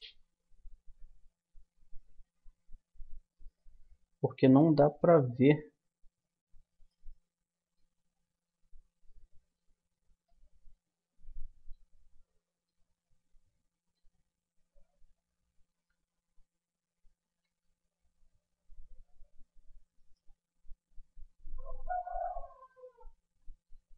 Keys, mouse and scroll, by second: 0.5-2.0 middle drag, 2.5 a, 3.1-5.4 middle drag, 7.0-10.1 middle drag, 10.2-13.2 middle drag, 14.6-17.4 middle drag, 15.9 Tab, 17.4 Tab, 19.4 Tab, 19.9-21.7 drag, 21.1 z, 23.7 z.